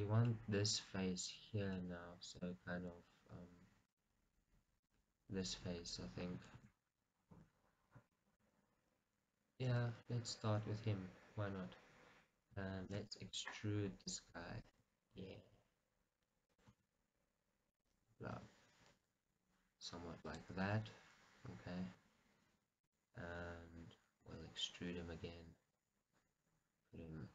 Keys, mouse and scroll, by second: 4.2 click, 4.9 click, 5.7 KP_1, 6.7 shift+z, 7.1-8.3 scroll down 2, 8.3 shift+middle click.